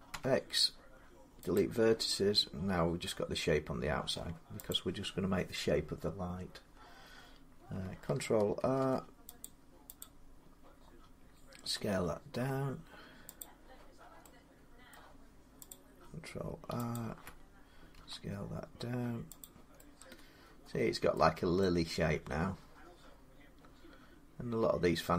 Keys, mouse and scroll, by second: 1.4 click, 3.9 middle click, 4.5 click, 8.4 ctrl+r, 9.2 click, 9.8 click, 11.4 s, 13.2 click, 14.7 middle click, 15.5 click, 16.7 alt+click, 17.8 s, 19.2 click, 20.9 middle click, 22.7-25.1 middle drag.